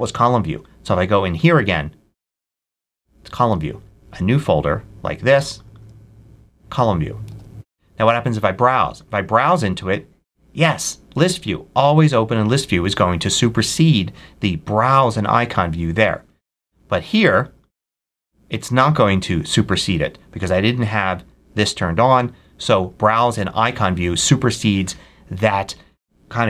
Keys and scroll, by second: 3.4 super+w, 7.2 super+w.